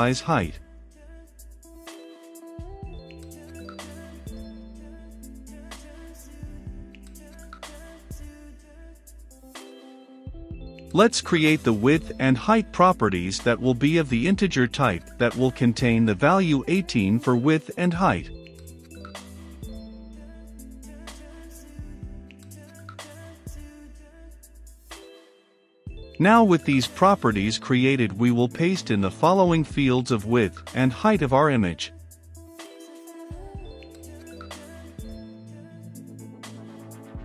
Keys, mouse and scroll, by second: 0.0-3.7 typing, 0.0 Return, 1.2 Return, 2.8 Return, 3.9 Return, 4.7 Return, 5.1 Down, 5.8-8.3 drag, 8.3-9.6 middle drag, 9.6-10.6 drag, 10.6 Return, 11.2-15.4 typing, 11.6 Return, 12.4 Return, 13.5 click, 15.3 Return, 15.7 Return, 16.3-17.4 drag, 17.4 Return, 18.5-19.4 typing, 18.9 Return, 20.1 click, 21.1 i, 21.8 click, 22.1 Return, 22.5 click, 22.6-23.7 typing, 24.1-25.7 drag, 25.7-26.7 middle drag, 26.7 click, 27.6 i, 27.7 c, 27.8 o, 28.0 n, 29.1 w, 29.9 Return, 31.0 click, 31.7 i, 31.8 c, 31.9 o, 32.1 n, 33.4 Return, 34.7 click, 35.3 i, 35.4 c, 35.5 o, 35.7 n, 36.7 Down.